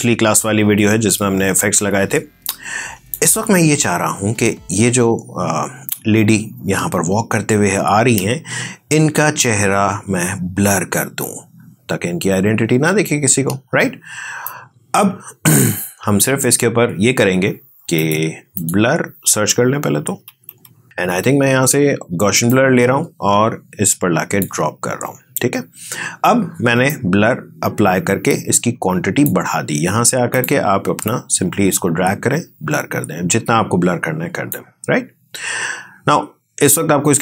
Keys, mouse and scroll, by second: 8.0 space, 13.2 space, 14.3-17.8 drag, 19.3-20.3 typing, 24.5 click.